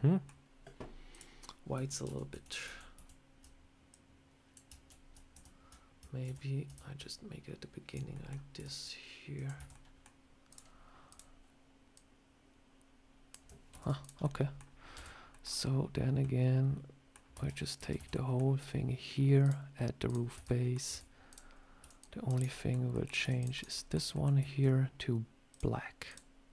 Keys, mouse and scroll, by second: 1.0 click, 2.0 ctrl+z, 2.2 ctrl+z, 2.5 ctrl+z, 2.9 ctrl+z, 3.8 click, 4.8 ctrl+z, 5.2 ctrl+z, 6.1 ctrl+z, 7.0 click, 8.0 middle click, 8.4 e, 9.5 Tab, 9.6 middle click, 10.1 scroll down 1, 10.4 click, 11.0 click, 11.8 click, 13.6 ctrl+z, 13.9 click, 14.1 middle click, 14.8 Tab, 15.2 middle click, 16.1 middle click, 17.2 Tab, 17.6 Tab, 17.8 a, 18.0 middle click, 19.3 click, 20.2 Tab, 20.3 middle click, 20.8 Tab, 21.1 click, 21.4 scroll up 1, 21.7 c, 22.4 middle click, 22.8 middle click, 23.1 c, 23.6 middle click, 24.0 middle click, 25.4 click, 25.9 click.